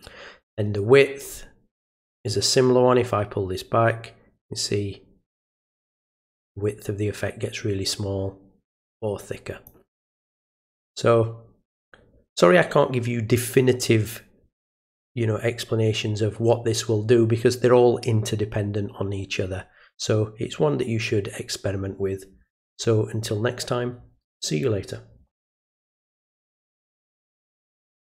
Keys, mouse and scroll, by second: 2.2-9.6 drag, 26.7 click.